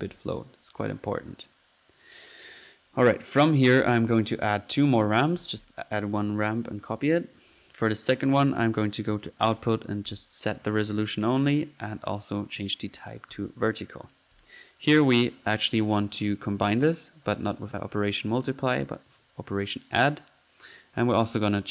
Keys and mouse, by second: 0.0 click, 1.3-1.6 drag, 2.0 middle click, 3.4 click, 4.0 typing, 4.5-5.0 drag, 5.1-6.1 typing, 6.1-6.7 ctrl+drag, 7.0 ctrl+click, 7.6-8.5 drag, 8.8-9.3 drag, 9.4 click, 10.1-10.4 drag, 11.1 click, 12.5 click, 13.3 click, 14.3 click, 15.8-16.1 drag, 18.8-19.2 drag, 19.6 click, 20.9 click.